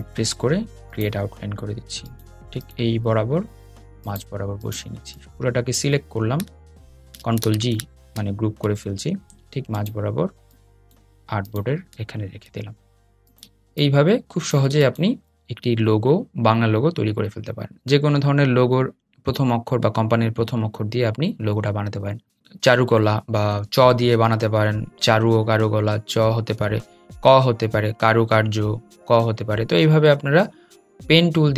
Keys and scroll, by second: 6.2 super+g, 7.5 super+g.